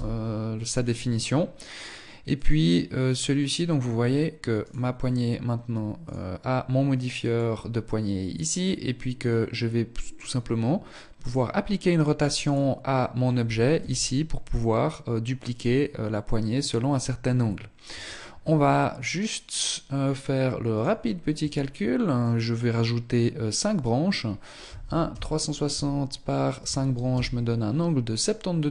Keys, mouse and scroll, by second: 1.6 click, 4.0 right click, 5.4 click, 10.6 right click, 11.8 right click, 13.1 r.